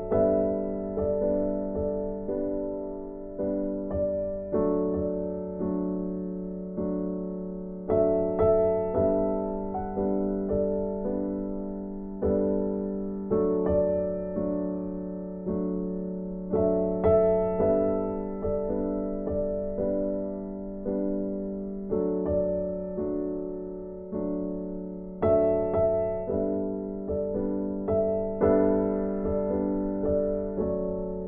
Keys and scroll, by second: 9.2 ctrl+z.